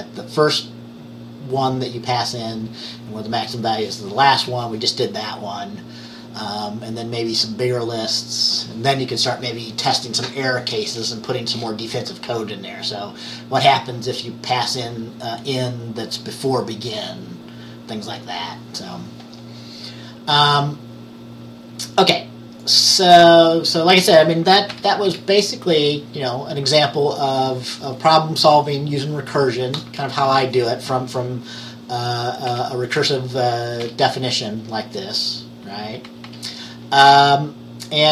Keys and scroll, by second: 24.8 Page_Up, 25.1 Page_Up, 32.6 Page_Down, 33.9 Page_Down, 36.1 Page_Up, 36.3 Page_Up.